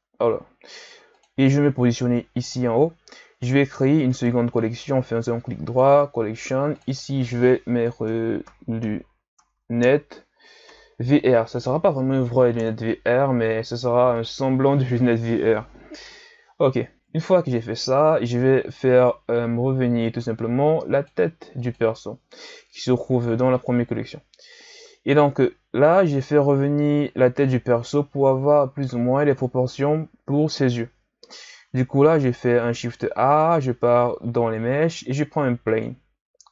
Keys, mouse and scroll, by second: 0.1 ctrl+s, 1.1 click, 2.4 click, 4.1-6.7 right drag, 6.7 click, 6.9-9.4 drag, 9.4 t, 14.1 click, 20.0 click, 20.9 click, 21.6 click, 25.1-25.6 shift+scroll down 3, 25.6-26.7 scroll up 4, 26.7-28.1 ctrl+scroll up 2, 28.1-31.2 shift+scroll up 3, 31.5 shift+a.